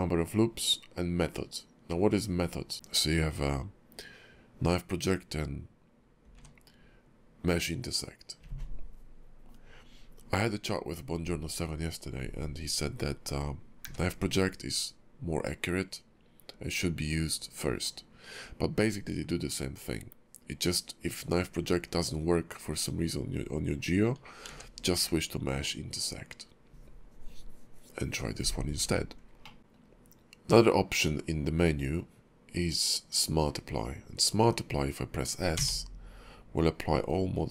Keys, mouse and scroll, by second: 29.4 middle click.